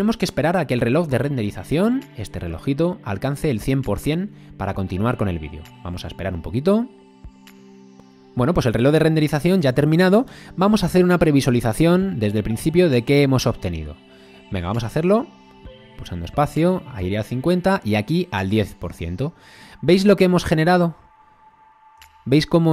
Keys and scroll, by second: 14.7 space, 22.0 space.